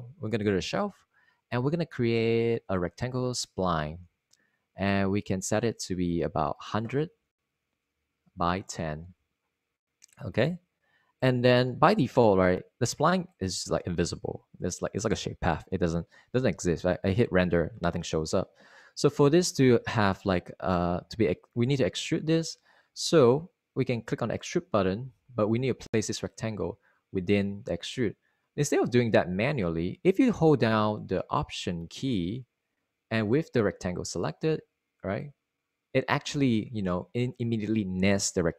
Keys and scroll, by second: 8.1 super+a, 8.4-10.1 typing, 17.5 super+r, 19.3 Escape, 30.2 super+z.